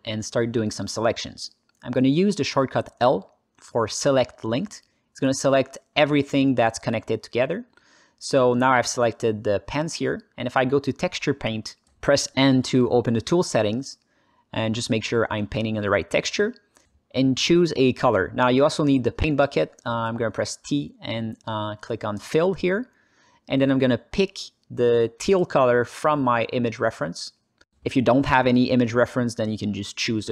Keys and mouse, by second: 4.2 l, 5.1 alt+middle click, 5.4 ctrl+alt+middle click, 6.2 alt+middle click, 7.5 alt+shift+middle click, 9.5-11.9 drag, 12.8 n, 14.6 click, 16.7 alt+middle click, 17.8 alt+middle click, 18.9 t, 21.3 click, 24.8 click.